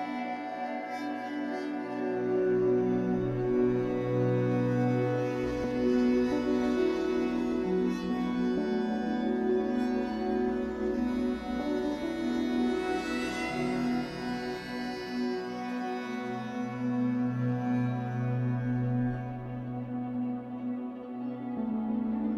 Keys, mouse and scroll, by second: 0.6 shift+middle click, 0.8 scroll up 1, 0.8 middle click, 1.3-1.7 scroll up 2, 1.7 shift+middle click, 2.0-2.3 scroll up 1, 2.3 click, 2.7 g, 3.4 click, 3.5 g, 4.3 g, 5.0 click, 5.1 g, 6.2 click, 6.4 g, 6.9 click, 7.0 g, 7.6 click, 7.7 g, 8.6 click, 8.8 g, 9.5 click, 9.6 g, 11.4 g, 12.7-13.4 scroll down 2, 13.4 click, 13.6 g, 14.5 click, 14.6 g, 15.6-16.6 middle drag, 16.6 click, 16.8-19.5 typing, 17.5 click, 18.1 click, 18.9 click, 20.6 s.